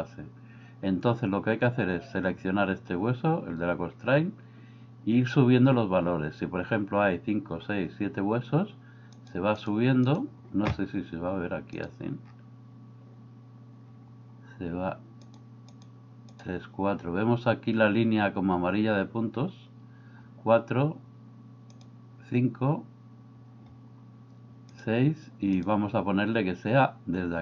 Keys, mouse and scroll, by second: 9.2 click, 9.6 click, 11.8 click, 15.8 click, 16.3 click, 21.8 click, 24.8 click.